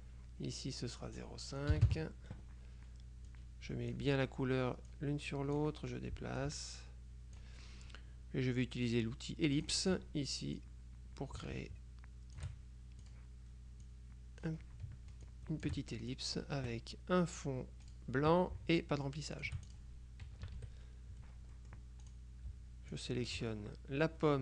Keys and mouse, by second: 1.1 click, 1.8 KP_5, 2.0 KP_Enter, 3.4-4.5 drag, 5.0-6.2 drag, 6.5-8.0 drag, 9.6 click, 10.7-13.0 drag, 13.1 click, 14.0-15.0 drag, 15.4 ctrl+shift+click, 18.0 click, 19.4 shift+click, 20.5 KP_Subtract, 21.6-22.7 drag, 23.0 shift+click.